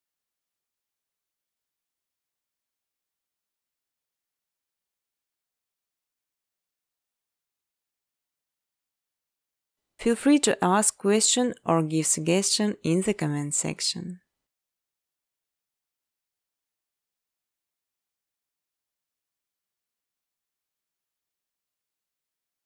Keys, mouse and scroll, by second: 0.0-2.4 typing, 0.9 click, 2.8 Tab, 3.0 Tab, 3.8 Tab, 4.4 Tab, 4.6 Tab, 4.8 Tab, 5.7-8.9 typing, 9.6 Tab, 10.8 typing, 10.9 Return, 12.1 space, 14.3 space, 15.2 click, 15.4 space, 19.2-22.6 typing, 19.6 scroll, 20.8 middle click.